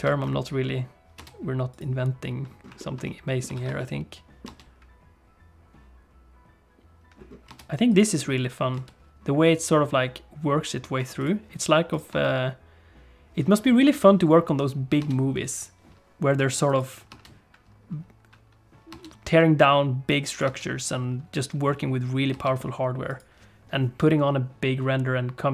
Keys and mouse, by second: 0.0 ctrl+space, 1.2 space, 1.8 click, 2.8 shift+middle click, 3.0 middle click, 3.6 ctrl+s, 3.7-6.8 middle drag, 4.4 space, 7.5 space, 7.8 click, 8.7 space, 11.0 space, 11.2 click, 11.9 click, 12.1 space, 15.0 space, 16.6 click, 18.9 space, 20.4 click, 20.4 space, 22.3 space, 23.0 click.